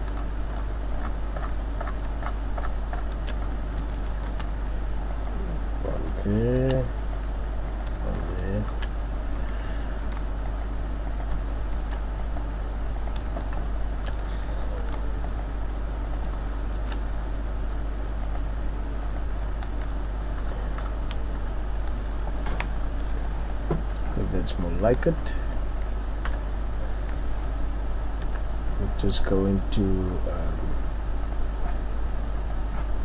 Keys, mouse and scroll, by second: 0.1-1.8 shift+scroll up 19, 3.4 shift+scroll up 19, 4.3 ctrl+r, 4.3 scroll up 1, 5.9 click, 6.5 ctrl+r, 7.8 click, 8.2-8.9 shift+scroll up 8, 8.9-9.3 scroll down 3, 10.0 ctrl+r, 11.2 click, 11.8 ctrl+r, 13.0 click, 13.5-14.7 shift+scroll up 5, 14.8 ctrl+r, 16.1 click, 16.7 ctrl+r, 19.1 click, 19.7 Tab, 19.9-20.7 scroll down 8, 21.4 scroll up 1, 21.5 middle click, 22.7-23.1 scroll down 3, 23.2 middle click, 23.7 scroll up 3, 24.2 middle click, 24.6 scroll up 1, 25.1 Tab, 25.2-25.8 scroll down 3, 26.3 KP_3, 28.2 n, 30.0-31.2 scroll up 3, 31.2 click, 32.3 click.